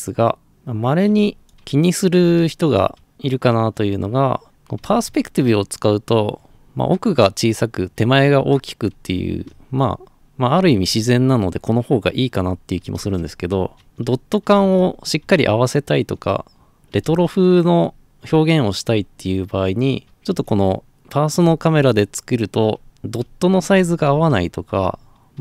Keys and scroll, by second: 1.2-18.8 typing, 20.1 d, 20.4 a, 21.4 a, 22.8-25.4 typing.